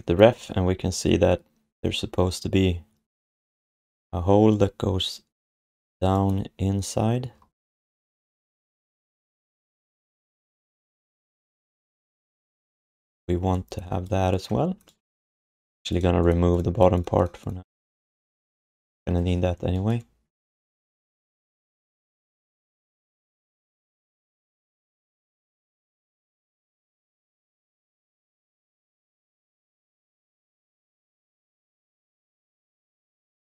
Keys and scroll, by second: 21.0 alt+shift+d, 21.2 ctrl+s, 22.7 3, 23.9 1, 28.5 r, 32.8-33.4 typing.